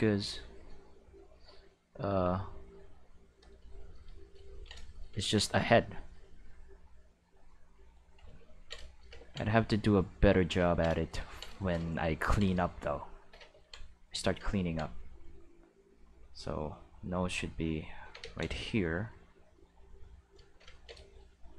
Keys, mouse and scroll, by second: 1.4-3.4 drag, 5.3 ctrl+middle click, 6.2-7.9 drag, 8.3 ctrl+middle click, 9.6 click, 11.3 ctrl+middle click, 12.3 ctrl+middle click, 16.7-18.0 drag, 18.2 ctrl+z, 18.8-20.0 drag.